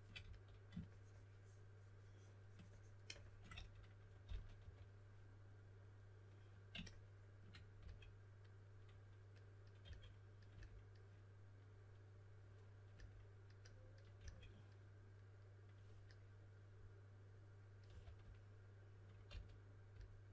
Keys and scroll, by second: 0.2 s, 3.4-5.0 typing, 7.7 s, 9.8 typing, 14.1 s, 17.8 s, 19.2 s.